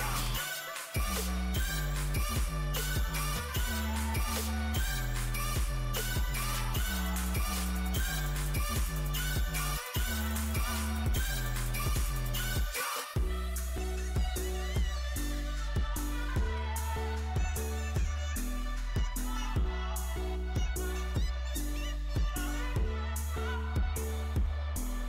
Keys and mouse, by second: 5.6-8.2 drag, 8.2-10.7 middle drag, 10.7-14.1 drag, 14.1-15.1 middle drag, 15.1 Tab, 16.3 z, 16.7 z, 18.7 KP_1, 19.1 z, 21.5-24.7 drag, 22.3 a, 23.2 c, 24.7 z.